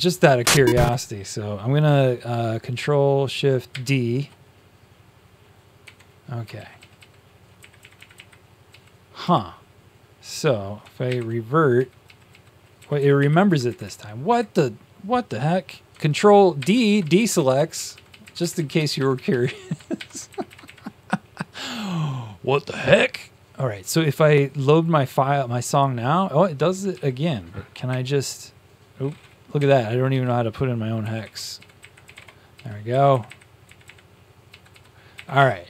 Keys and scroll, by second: 0.7 space, 3.6 ctrl+shift+d, 5.7 Tab, 6.4 shift+Down, 6.7 shift+Down, 6.9 shift+Down, 7.9 Up, 8.7 Up, 8.7 Down, 9.2 Left, 10.9 ctrl+r, 11.7 Down, 12.0 Down, 12.7 Down, 13.2 Up, 13.4 Left, 13.6 Left, 13.7 Left, 14.3 Left, 16.5 ctrl+d, 16.9 Down, 17.1 Left, 17.2 Left, 17.7 shift+Down, 17.8 shift+Down, 18.1 shift+Down, 18.1 shift+Left, 18.3 shift+Left, 18.5 shift+Left, 18.7 shift+Down, 18.9 shift+Down, 19.9 shift+Down, 19.9 ctrl+d, 20.5 Up, 28.2 typing, 29.2-30.0 typing, 31.1-33.2 typing, 34.8-35.6 typing, 35.6 Down.